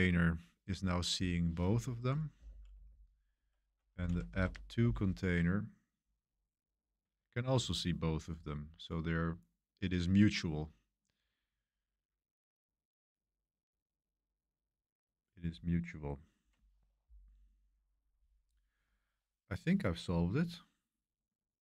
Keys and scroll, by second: 2.4 Up, 4.3 typing, 4.8 Return.